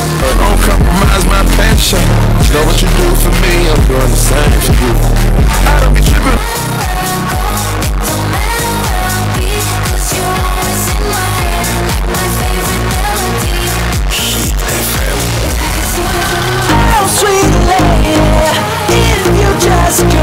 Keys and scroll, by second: 6.4 Page_Down.